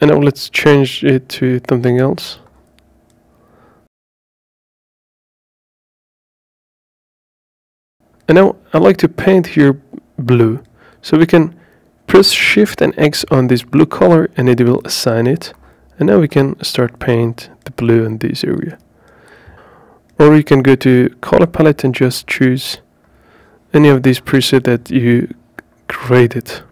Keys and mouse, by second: 2.0 shift+x, 7.7 shift+x, 18.1 shift+x, 20.9 click, 21.8 click.